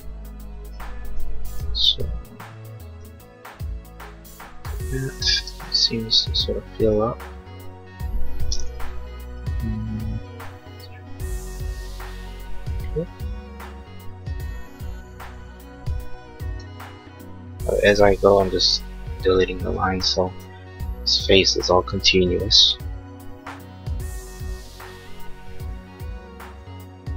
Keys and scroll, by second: 1.8 l, 5.4 space, 6.2 e, 16.7 e, 19.8 space, 23.2 l.